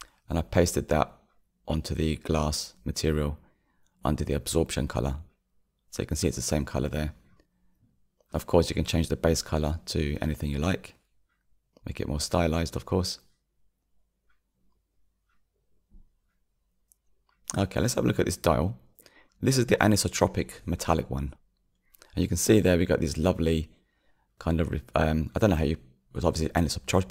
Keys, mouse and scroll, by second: 0.3 click, 1.7 click, 2.4 click, 3.1 click, 6.6 click, 7.2 scroll down 4, 8.7-14.0 middle drag, 14.0 click, 16.7 KP_Decimal, 19.2-20.6 drag, 20.6-23.8 middle drag, 23.8-27.1 drag.